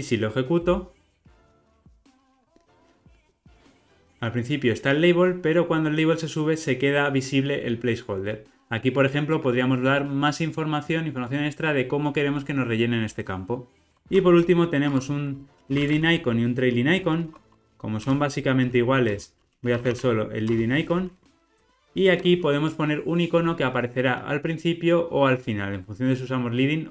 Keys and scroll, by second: 0.7 ctrl+r, 14.9 Tab, 20.5 Return.